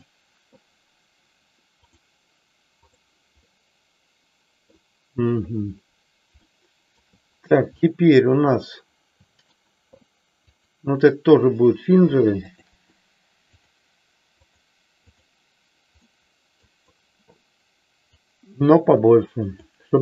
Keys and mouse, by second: 2.8 click, 3.5-4.8 middle drag, 6.4 shift+middle click, 7.9-9.7 middle drag, 10.6-11.6 drag, 13.7 click, 16.0 middle click, 18.0-20.0 drag.